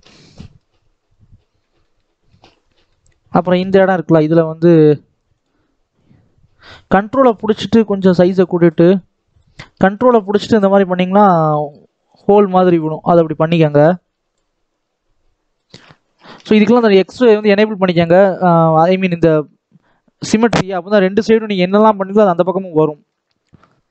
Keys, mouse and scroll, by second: 0.9 middle click, 1.1-1.4 scroll up 2, 1.5-2.9 middle drag, 2.9-5.1 scroll up 1, 5.1-15.7 drag, 15.7-16.5 scroll down 1, 17.9-22.5 middle drag, 22.5 scroll up 1, 22.8-23.9 middle drag.